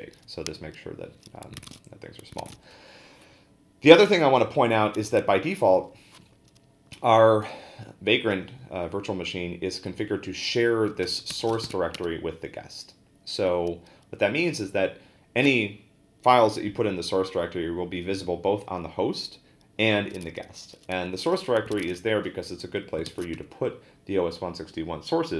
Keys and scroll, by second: 1.6 a, 2.4 ctrl+a, 2.5 n, 10.8-12.1 typing, 21.5-23.3 typing, 23.1 ctrl+a.